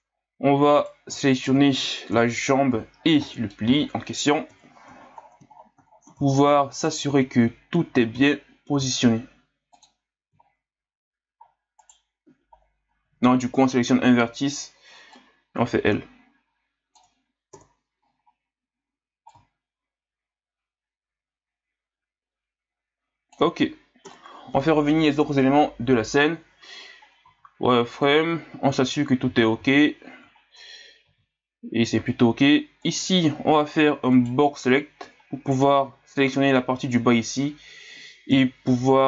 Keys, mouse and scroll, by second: 0.8 right click, 1.3 shift+right click, 2.1 KP_Divide, 3.0 scroll down 2, 3.2-3.8 middle drag, 3.9 scroll down 2, 4.5 KP_1, 5.2 scroll down 5, 5.5 scroll up 4, 5.9 scroll down 1, 6.3 scroll up 3, 6.7 right click, 7.1 Tab, 7.9 a, 8.1 a, 8.7 a, 9.7 click, 10.4-11.4 scroll up 1, 11.4-11.8 scroll down 4, 11.8 right click, 12.6 scroll up 2, 13.0 l, 13.7 scroll up 2, 15.1-17.5 drag, 17.5 KP_3, 19.2-22.3 drag, 24.0 KP_Divide, 25.2 KP_1, 27.2 z, 29.3 z, 29.6 z, 30.4 scroll down 1, 30.7 scroll up 3, 31.0 z, 31.8 z, 32.8 right click, 34.1 right click, 35.0 b, 38.3 KP_3.